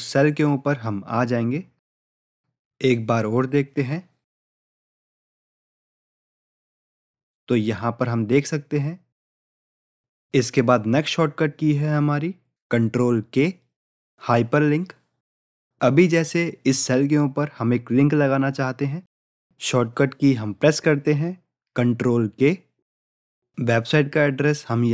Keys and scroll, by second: 3.7 ctrl+j, 22.9 ctrl+k.